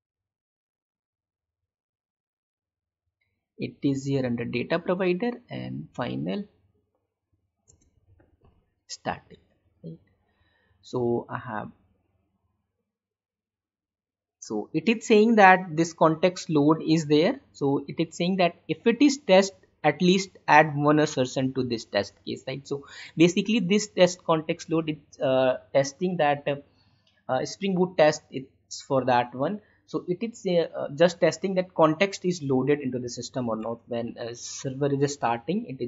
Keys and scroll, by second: 7.6 space, 9.3 alt+Tab, 33.7 alt+Tab.